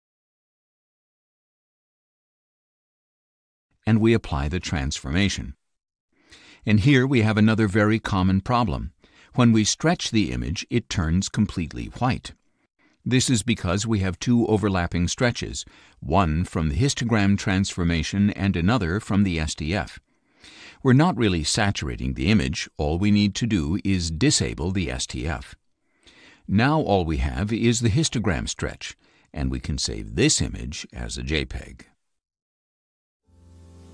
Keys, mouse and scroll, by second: 0.7-2.5 drag, 2.9 click, 4.9 click, 16.6-18.2 drag, 19.3 click, 23.5 click, 27.9-29.4 drag.